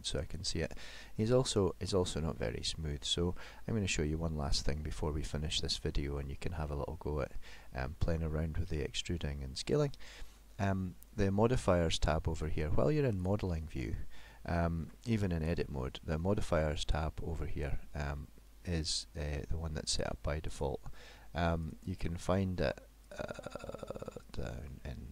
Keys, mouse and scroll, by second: 1.5 middle click, 6.2 middle click, 7.6 middle click, 13.2 click, 14.8 Tab, 20.5 click, 21.7 click, 23.1 click, 23.4 click, 23.8 click, 25.0 click.